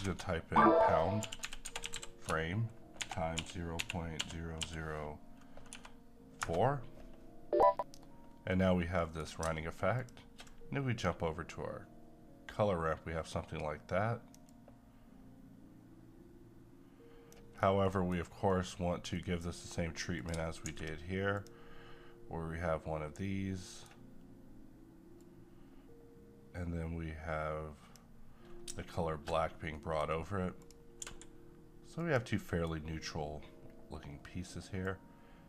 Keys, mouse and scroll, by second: 1.0-1.9 typing, 3.0-4.6 typing, 5.7 4, 6.4 Return, 8.5-9.9 middle drag, 9.9 ctrl+shift+click, 13.4-17.5 drag, 17.5 scroll down 1, 17.8 middle click, 18.2 scroll down 1, 18.5 middle click, 18.8-19.1 scroll up 1, 19.1 middle click, 19.7-20.2 scroll up 1, 20.2 click, 20.7 d, 21.4 click, 23.5 middle click, 23.6 middle click, 25.2-29.5 drag, 29.5 scroll down 1, 29.8 middle click, 30.1-30.6 scroll up 1, 30.6 click, 31.0 g, 32.0 click, 32.4 middle click, 33.6-34.8 scroll up 1, 34.8 click.